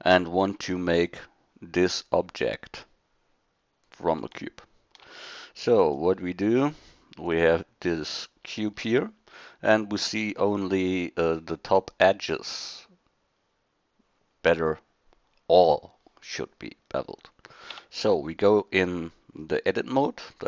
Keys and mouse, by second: 5.0 shift+d, 6.6 drag, 8.7 middle click, 17.7 Tab.